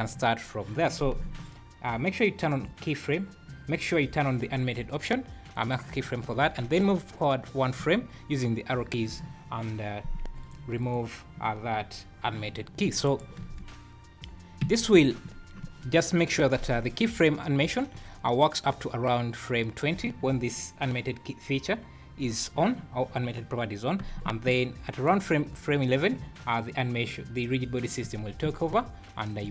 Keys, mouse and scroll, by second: 2.6 click, 5.4 click, 7.7 Right, 10.4 click, 10.8 click, 13.1 shift+right click, 13.4 space, 14.6 Escape, 18.4 shift+right click, 24.5 shift+right click, 28.0 space, 28.7 Escape.